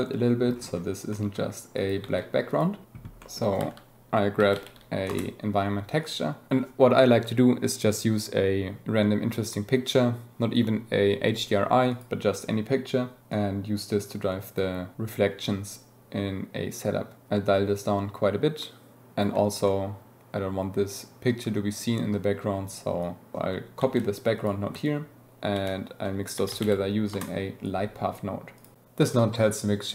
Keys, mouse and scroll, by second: 1.0 click, 1.7 click, 2.4 click, 3.2 click, 6.0 click, 6.6-11.1 drag, 13.3-14.0 drag, 14.5-14.8 middle drag, 15.6-18.9 shift+middle drag, 19.7-21.9 drag, 22.0 click, 23.0 click, 24.3-24.7 drag, 24.8 ctrl+shift+click, 25.3 shift+a, 28.5-29.9 drag.